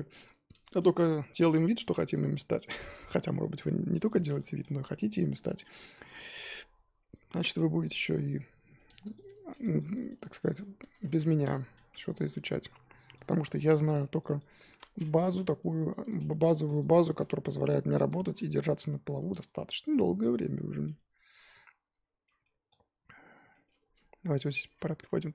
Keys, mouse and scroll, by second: 0.2 click, 1.0-2.6 drag, 2.9-4.0 middle drag, 4.1-5.2 drag, 5.3-7.6 drag, 8.0-9.2 scroll up 1, 9.2 click, 9.9-12.0 drag, 13.2-14.2 drag, 14.4-15.7 drag, 16.8 click, 18.5-19.2 drag, 20.0 click, 21.7-22.2 scroll down 2, 22.2-23.3 middle drag, 23.3 click, 23.5-24.6 middle drag, 24.6 click, 25.0 Down.